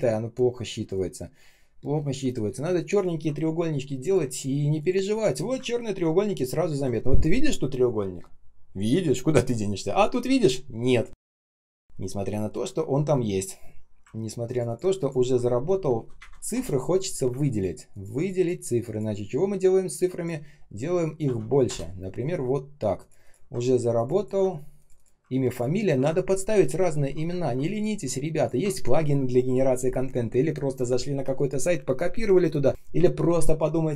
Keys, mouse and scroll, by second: 0.7 space, 1.2 space, 1.7 space, 2.9 ctrl+click, 5.7-6.8 ctrl+scroll down 1, 11.4 space, 11.9 space, 11.9 space, 14.1 ctrl+scroll up 1, 14.4 ctrl+click, 14.6 ctrl+click, 16.1 Right, 16.1 Delete, 16.4 Return, 17.4 ctrl+click, 17.8 ctrl+click, 21.3-22.1 typing, 23.9 ctrl+click, 24.0 ctrl+click, 25.4 ctrl+click, 27.3 ctrl+scroll down 1, 28.2 ctrl+click.